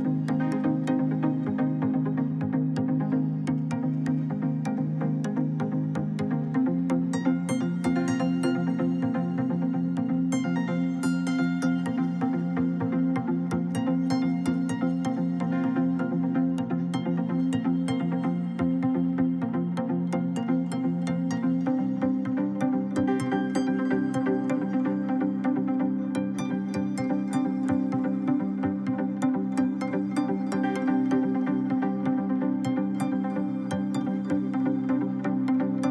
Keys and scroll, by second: 9.7 ctrl+z, 24.6 2, 25.1 Return.